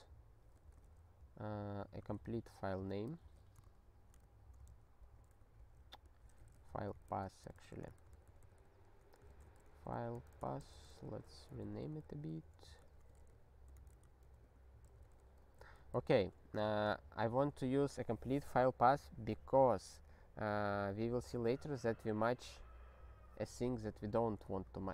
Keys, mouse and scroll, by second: 0.3-2.0 typing, 3.3 ctrl+p, 3.6 alt+b, 4.2 ctrl+n, 4.7 alt+f, 5.0 alt+f, 5.4 alt+b, 6.0 alt+d, 6.1-7.6 typing, 7.6 ctrl+p, 7.9 alt+b, 8.1 alt+b, 8.4 alt+b, 8.5 alt+b, 9.2-10.8 typing, 10.9 ctrl+p, 11.0 ctrl+p, 11.6 alt+b, 11.8 alt+b, 12.2 alt+b, 12.8 ctrl+f, 13.0 i, 13.3 e, 13.9 t, 14.2 ctrl+g, 14.8 ctrl+g, 15.1 ctrl+s, 15.4 ctrl+n, 15.5 ctrl+n, 15.9 ctrl+n, 16.8 ctrl+e, 24.8 ctrl+n.